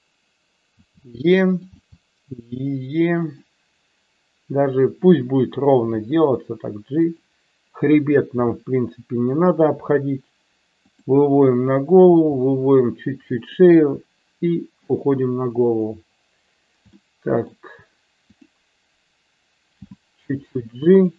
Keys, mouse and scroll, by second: 0.8 e, 1.5 click, 1.8 e, 3.3 click, 5.8 g, 7.1 click, 8.4 e, 10.8 click, 12.0 e, 13.3 click, 13.8 e, 14.9 click, 17.0 shift+middle click, 18.3 click, 19.8 g, 20.9 click.